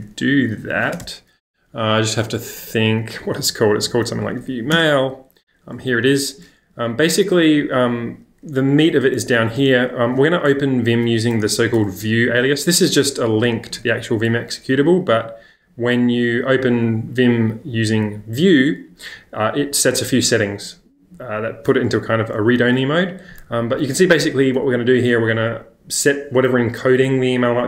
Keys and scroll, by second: 1.0 space, 2.9-4.8 typing, 6.8 j, 7.0 j, 7.1 j, 8.7-10.2 typing, 11.4 w, 12.1 shift+8, 15.0 j, 16.0 j, 23.7 w, 24.1 w, 25.2 w.